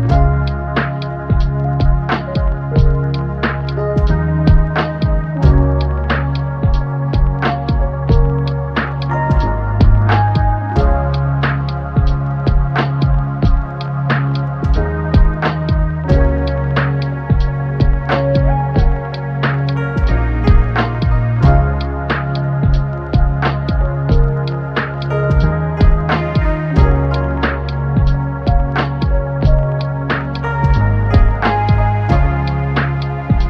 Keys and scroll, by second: 4.5 6, 4.5 Return, 13.1 BackSpace, 22.1 Tab, 29.0 Tab, 30.0 typing, 30.1 Return.